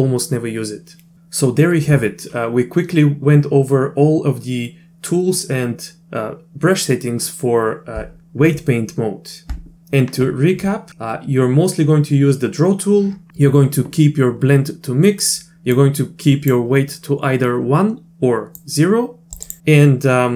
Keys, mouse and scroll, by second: 15.8-16.5 drag, 18.6 click.